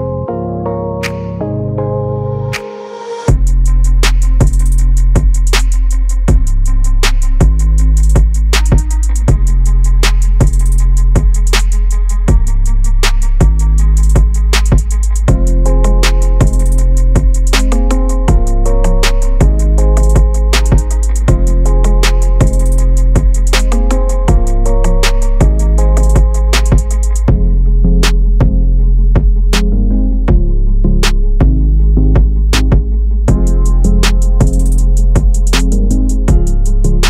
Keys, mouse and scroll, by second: 0.0 click, 0.3 scroll up 2, 0.5-0.9 scroll down 2, 0.9 scroll up 2, 1.2-1.7 scroll down 1, 1.7 Tab, 2.8 click, 4.1 click, 5.3 click, 5.8 click, 8.2-10.6 drag, 10.6 Tab, 11.5 click, 11.9-12.3 scroll down 1, 12.3-13.9 drag, 13.9 s, 14.9 g, 15.9-16.4 scroll down 1, 16.4 click, 16.8-17.3 scroll down 1, 17.3 g, 18.7 click, 19.0-20.4 scroll up 2, 20.4 click, 21.1 click, 22.6 click, 24.5 scroll down 1, 24.8-25.2 scroll up 2, 25.2-26.0 scroll down 1, 26.0-27.1 drag, 27.3 click, 28.3-29.9 middle drag, 29.9-32.7 drag, 32.7 scroll down 1, 32.8 middle click, 33.5 click, 34.4-35.8 middle drag, 35.8 click.